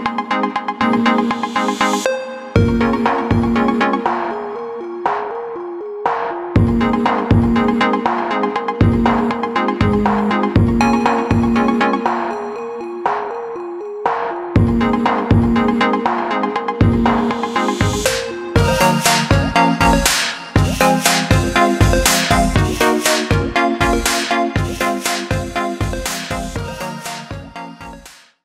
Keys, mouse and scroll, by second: 5.7 click, 7.4-8.9 drag, 8.9 KP_0, 11.8 space, 12.6 click, 16.2-17.4 middle drag, 17.4 scroll down 1, 17.5-20.6 middle drag.